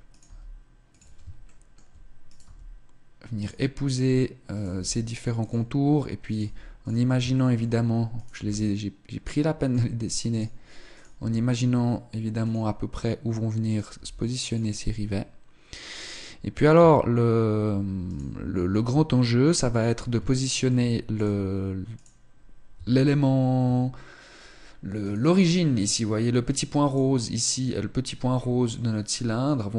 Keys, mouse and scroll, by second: 0.0 g, 1.2 shift+middle click, 1.2 right click, 2.1 g, 3.1 click, 3.7 right click, 3.7 g, 5.9 right click, 6.0 g, 7.0 shift+middle click, 7.1 right click, 8.0 g, 10.0 right click, 10.6 right click, 10.8 g, 11.5 click, 13.3 right click, 13.6 g, 15.5 right click, 16.4 Tab, 18.6 Tab, 20.0 shift+middle click, 20.1 right click, 21.0 right click, 22.4 Tab, 23.3 Tab, 24.7 right click, 26.6 right click, 28.0-28.8 scroll up 2, 28.1 middle click, 29.6 right click.